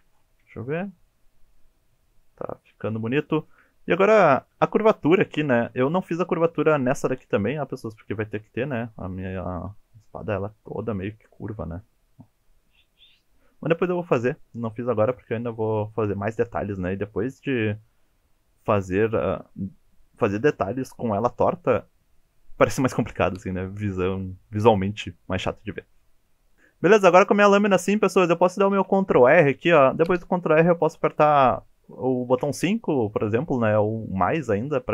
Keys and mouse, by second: 0.5 shift+middle click, 1.0 shift+middle click, 1.3 shift+middle click, 1.9 shift+middle click, 2.5 shift+middle click, 2.9 shift+middle click, 3.2 shift+middle click, 4.3 shift+middle click, 5.7 shift+middle click, 9.5 shift+middle click, 15.3 shift+middle click, 24.0 shift+middle click, 26.0 shift+middle click, 26.5 ctrl+z, 28.7 ctrl+r.